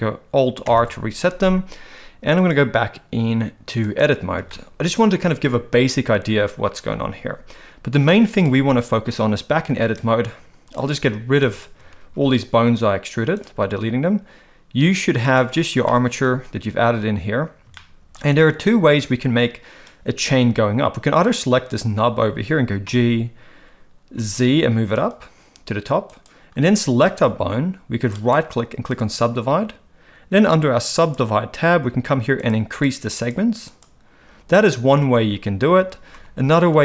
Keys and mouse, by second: 0.7 alt+r, 2.4-4.0 drag, 4.5 shift+middle click, 10.1 click, 11.5 shift+click, 12.0 x, 15.2 click, 15.8 shift+middle click, 17.7 shift+middle click, 21.2 click, 22.9 g, 27.2 click, 28.2-29.1 right drag, 31.1 click, 32.4 click, 33.2 click, 33.8 click, 36.1 ctrl+z, 36.7 ctrl+z.